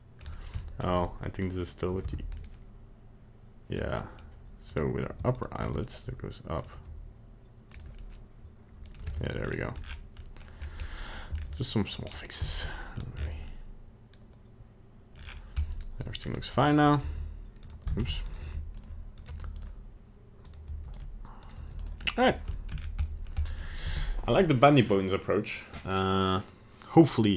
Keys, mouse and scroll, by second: 0.2 middle click, 0.6 shift+middle click, 0.7 shift+middle click, 1.6 click, 2.1 Tab, 2.5 middle click, 2.8 middle click, 4.0 middle click, 4.2 middle click, 4.7 right click, 5.4 ctrl+right click, 5.7 middle click, 6.6 middle click, 6.7 g, 8.0 middle click, 9.1 Tab, 9.4-10.0 scroll down 10, 10.2 middle click, 10.6 scroll up 1, 10.9 middle click, 11.4 scroll up 2, 11.6 middle click, 12.0 scroll down 2, 12.4 shift+middle click, 12.6 shift+middle click, 12.7 middle click, 12.9 middle click, 13.0 shift+middle click, 13.2 scroll up 4, 13.5 middle click, 15.2-15.5 scroll down 7, 15.6 middle click, 16.0 middle click, 16.2-16.9 scroll up 2, 16.9 right click, 17.0 g, 18.0 ctrl+Tab, 18.2 right click, 18.4 g, 19.2 right click, 19.3 g, 20.5 right click, 20.7 g, 21.4 right click, 21.6 g, 22.0 middle click, 22.5 shift+middle click, 22.7 scroll down 3, 23.0 middle click, 23.2 middle click, 23.3 shift+middle click, 23.4 middle click, 23.6 shift+middle click.